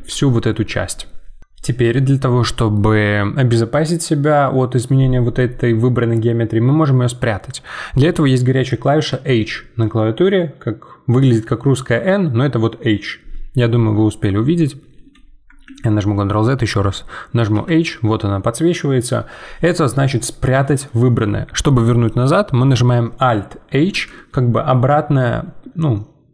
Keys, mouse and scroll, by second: 15.6 ctrl+z, 17.5 h, 23.9 alt+h.